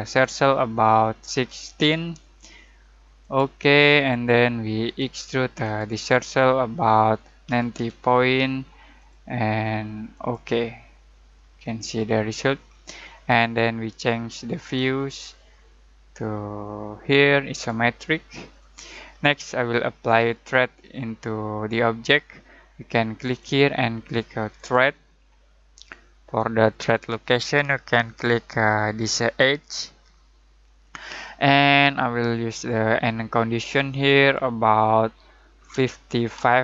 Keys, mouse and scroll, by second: 0.2 typing, 1.3-1.7 typing, 3.2 click, 5.7 typing, 7.2-8.4 typing, 8.9 click, 11.3 scroll down 1, 11.5-12.2 scroll up 1, 12.3-14.2 scroll down 1, 14.6 click, 17.5 click, 20.5 typing, 23.2 click, 23.2 click, 23.2 typing, 29.2 click, 29.6 typing, 32.3 typing, 33.6-35.7 drag, 35.7-36.3 typing.